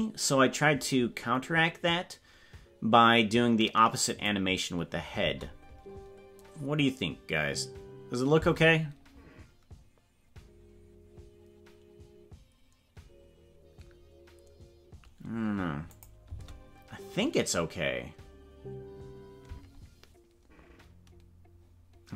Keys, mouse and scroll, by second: 4.2 click, 5.2 space, 16.0 click, 16.3 space.